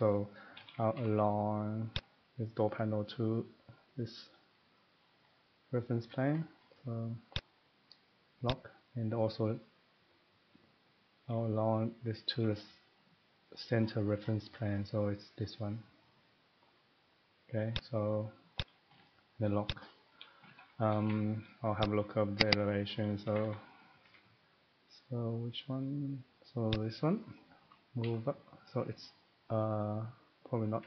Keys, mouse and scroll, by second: 0.6-0.9 typing, 2.0 click, 4.3 middle click, 4.4 middle click, 4.7 middle click, 5.0 scroll down 4, 5.3-7.1 middle click, 6.3-7.0 scroll down 4, 7.3 click, 7.8 scroll, 8.5 click, 8.9-9.2 scroll, 12.3 Tab, 14.1 scroll down 5, 14.7-15.3 scroll up 1, 17.7 click, 18.5 click, 19.7 click, 20.3 middle click, 20.5 Escape, 20.8 Escape, 21.0 Escape, 21.8 click, 22.5 click, 22.6 click, 23.0 middle click, 23.2 Escape, 23.4 Escape, 23.5 middle click, 23.9 middle click, 24.0 Escape, 26.8 click, 27.3 middle click, 30.7 Up, 30.7 Escape.